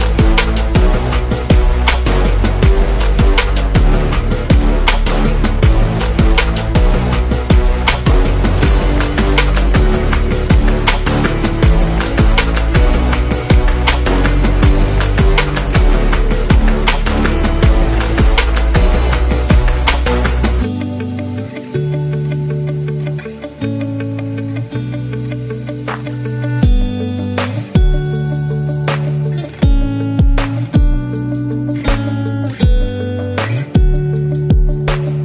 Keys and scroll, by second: 0.8 z, 1.8 v, 5.2 r, 7.4 super+g, 8.1 v, 15.6 BackSpace, 16.4 super+-, 20.0 space, 26.4 super+g, 28.8 super+z, 29.4 super+z, 31.8 super+g, 32.0 v.